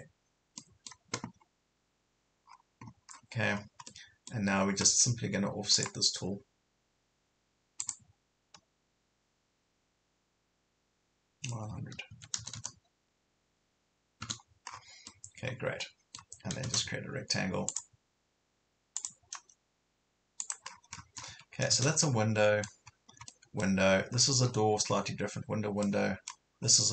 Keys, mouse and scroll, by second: 0.6 middle click, 2.4 scroll up 1, 3.1 scroll down 1, 3.5 scroll up 1, 3.9 middle click, 5.7 click, 12.1 KP_9, 14.7 scroll down 1, 15.1-16.5 middle drag, 17.6 space, 17.7 click, 20.7 scroll down 1, 21.3 Escape, 22.0 middle click, 22.9 scroll up 1, 23.3 middle click, 23.9 scroll down 1, 24.9 scroll up 1, 25.9 middle click, 26.5 scroll down 1.